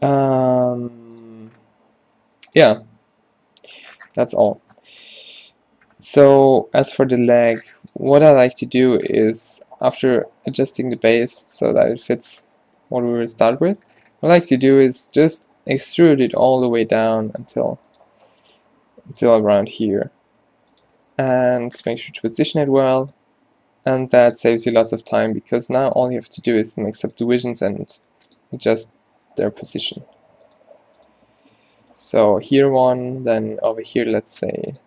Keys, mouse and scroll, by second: 0.4 r, 9.5 s, 15.8 e, 17.0 s, 17.6 g, 18.6 s, 18.6 g, 19.7 s, 22.2 g, 22.7 g, 23.2 s, 24.5 g, 25.4 r, 26.6 ctrl+r, 27.9 g, 28.6 s, 30.5 r, 30.7 g, 31.6 r, 31.6 g, 32.4 ctrl+r, 33.7 ctrl+r.